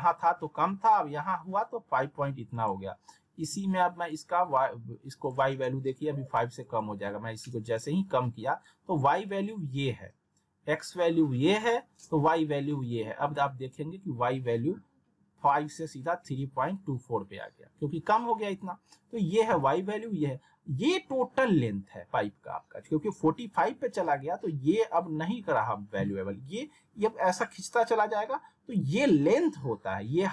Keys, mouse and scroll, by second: 2.5-8.7 drag, 13.6 click.